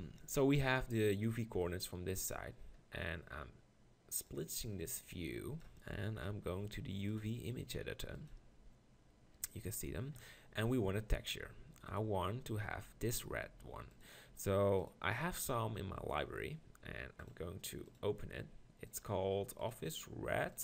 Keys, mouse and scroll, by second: 4.2 click, 7.4-10.0 drag, 17.2-20.6 drag.